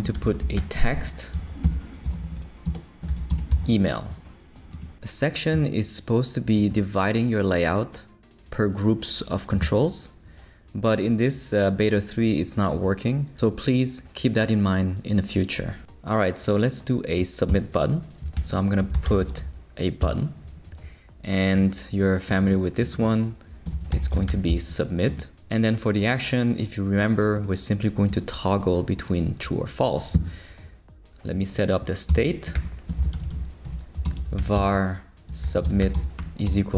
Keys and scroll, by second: 0.0-4.0 typing, 1.6 shift+Left, 2.7 shift+Left, 17.5 Return, 18.2 shift+super+Return, 18.3 shift+super+l, 18.7-19.9 typing, 20.0 Return, 23.7-24.8 typing, 32.1 Return, 32.3-36.7 typing.